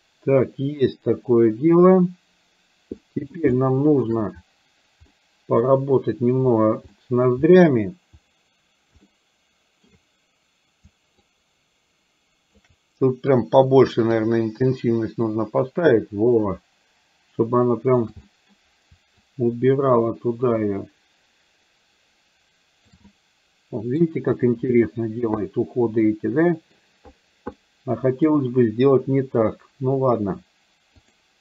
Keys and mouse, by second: 3.0 middle click, 3.5 shift+middle click, 5.1 middle click, 6.9 middle click, 9.1 shift+middle click, 11.3-12.6 ctrl+drag, 13.4 click, 15.4-18.1 ctrl+drag, 18.3 middle click, 19.3-22.9 ctrl+drag, 23.1 middle click, 25.5-26.8 middle drag, 27.6 middle click.